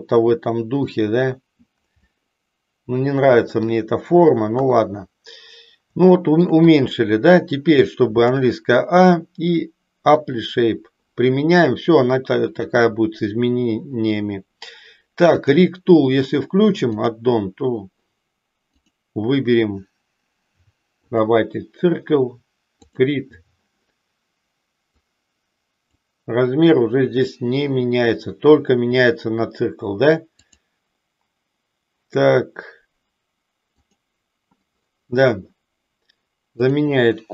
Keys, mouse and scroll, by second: 2.2-3.7 middle drag, 4.5 KP_3, 6.1 shift+middle click, 6.8 click, 12.5 click, 15.3 click, 16.9 click, 18.7-21.3 drag, 22.8 click, 25.1 click, 30.4-31.3 drag, 33.8 click, 36.5-37.3 drag.